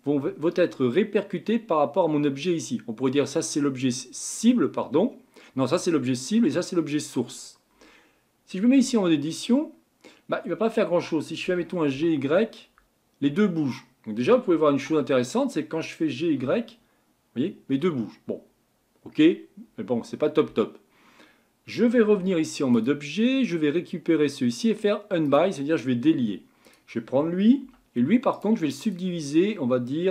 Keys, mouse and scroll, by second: 8.8 Tab, 11.4 g, 14.9 g, 22.2 Tab, 22.7 click, 25.2-26.7 drag, 27.6 Tab, 28.3-30.1 right drag.